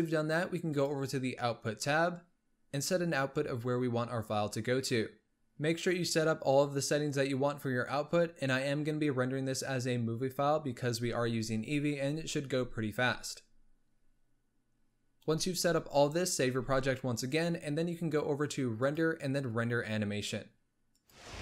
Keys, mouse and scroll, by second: 0.8 click, 5.3-7.4 scroll down 3, 16.8 ctrl+s, 18.9-21.3 drag.